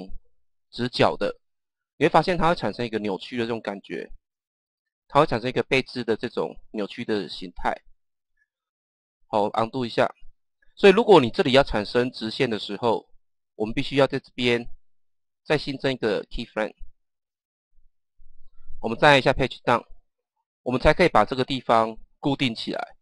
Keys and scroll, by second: 9.2 ctrl+z, 10.1 ctrl+z, 19.6 Page_Down.